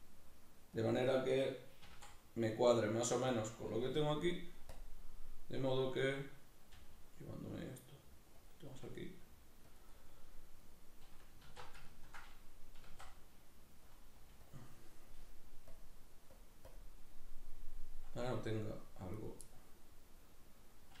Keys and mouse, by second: 0.9 click, 1.8 s, 3.4 click, 6.7 g, 8.5 click, 8.7 s, 9.8 click, 9.9-14.0 middle drag, 11.5 alt+q, 12.8 s, 14.0 click, 14.2 g, 14.6 click, 19.2 right click, 19.4-21.0 middle drag.